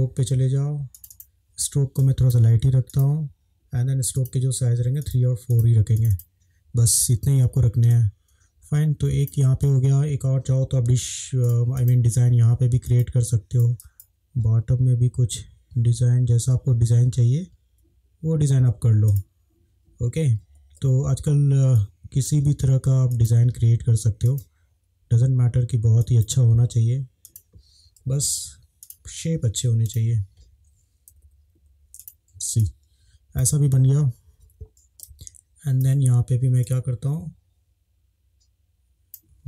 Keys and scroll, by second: 7.9 space, 20.4 ctrl+z, 20.8 ctrl+z, 28.1 |, 31.1 Down, 31.3 Down, 31.6 Down, 32.6 space.